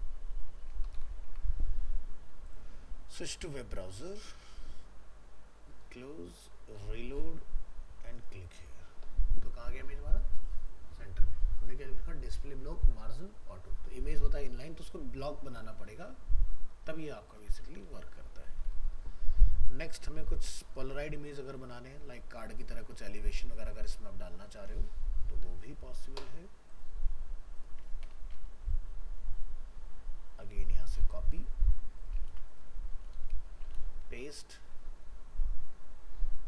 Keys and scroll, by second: 1.2 ctrl+s, 17.8 ctrl+w, 32.3 ctrl+c, 33.7 ctrl+v.